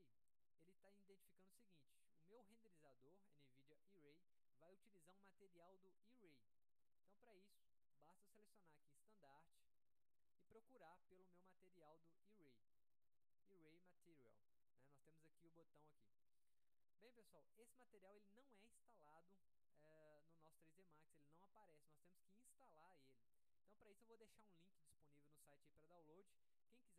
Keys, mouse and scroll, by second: 1.6-2.6 drag, 8.0 click, 9.1 click, 10.5-11.4 drag, 12.5 middle click.